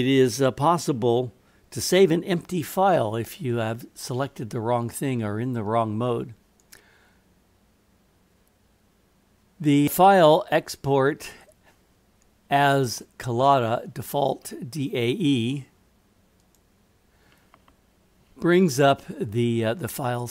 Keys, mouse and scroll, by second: 6.6-16.8 drag.